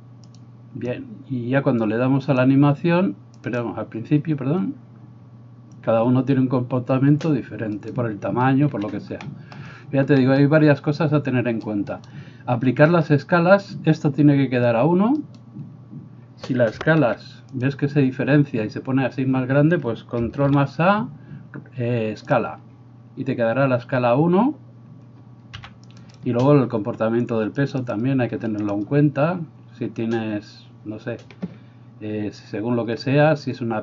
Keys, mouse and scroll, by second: 7.9 middle click, 7.9 right click, 8.8 Escape, 12.0 middle click, 12.0 right click, 15.3 middle click, 15.3 right click, 17.1 s, 17.8-26.3 middle drag, 20.5 ctrl+a, 25.6 g, 26.3-27.8 drag, 27.8 middle click, 27.9 click, 28.8-33.8 middle drag.